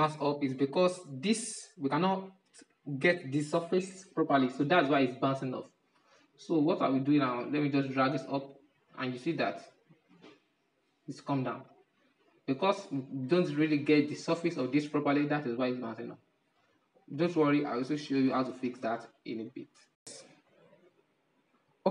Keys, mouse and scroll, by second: 0.9-2.2 middle drag, 2.2-3.7 drag, 3.7-4.3 scroll up 6, 4.3-7.5 shift+middle drag, 7.5-8.3 drag, 8.3-8.9 middle drag, 8.9 scroll down 7, 10.0-12.8 drag, 12.8-13.4 scroll up 5, 13.4-15.6 middle drag, 15.6-18.7 drag, 20.1 click.